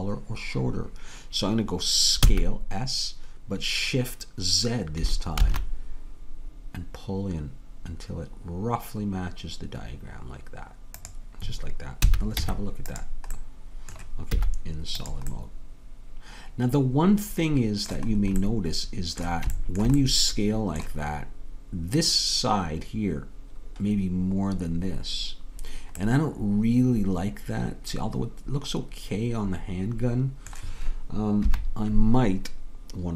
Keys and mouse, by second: 2.3 s, 12.1 a, 12.4 Tab, 14.4 z, 27.4-29.3 middle drag, 31.5 KP_3.